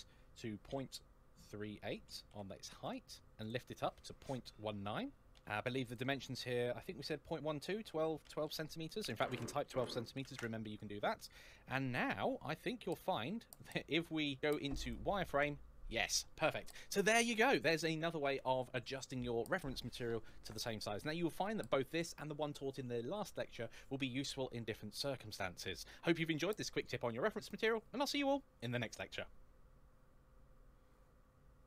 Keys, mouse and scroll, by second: 1.9 KP_3, 2.1 KP_8, 2.7 Return, 3.2 click, 5.7 click, 8.2-10.0 typing, 10.2 Return, 12.2-13.4 scroll up 1, 13.4 shift+middle click, 14.2-14.6 scroll down 2, 14.6 click.